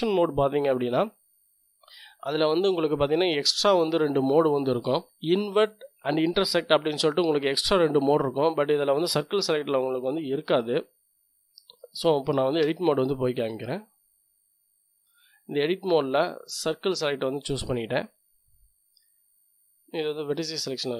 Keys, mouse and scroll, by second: 12.6 Tab, 13.4-14.9 middle drag, 15.6-17.0 drag, 18.1 click, 18.3 middle click, 20.3 click, 20.4-20.8 scroll up 2, 20.8 click.